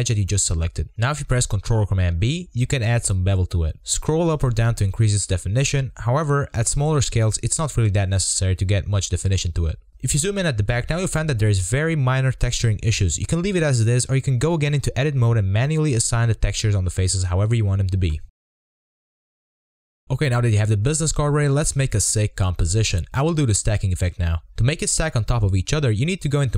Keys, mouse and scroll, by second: 7.9 Tab, 8.0 scroll up 1, 8.0 shift+middle drag, 8.3 scroll down 3, 8.3 middle click, 8.4 click, 8.7 r, 9.2 middle click, 9.2-9.6 scroll up 2, 9.6-10.2 shift+middle drag, 10.2-10.5 scroll up 2, 10.5-11.4 shift+middle drag, 11.4-11.9 scroll down 1, 11.9 shift+middle click, 12.2-12.6 scroll up 1, 12.6 scroll down 1, 13.3 shift+middle click, 13.9-14.5 scroll up 1, 14.5-15.4 shift+middle drag, 15.4-15.7 scroll down 1, 15.7 click, 15.8 Tab, 16.3 click, 16.8 alt+shift+click, 16.9 middle click, 17.1 scroll down 1, 17.2 shift+middle click, 17.2 scroll up 1, 17.3 scroll down 1, 17.3 shift+middle click, 17.4 alt+shift+click, 17.5 scroll up 1, 17.5 shift+middle click, 17.6 alt+shift+click, 17.7 scroll down 1, 17.7 middle click, 17.8 scroll up 2, 17.8 shift+middle click, 17.9 shift+middle click, 18.1 alt+shift+click, 18.1 alt+shift+click, 18.3 middle click, 18.9 scroll up 2, 19.0 shift+middle click, 19.9 click, 20.0 middle click, 20.2 scroll down 2, 20.3 middle click, 20.5 Tab, 21.2-22.1 shift+middle drag, 24.6-25.4 drag, 25.4-26.2 scroll down 5, 26.2-26.5 middle drag.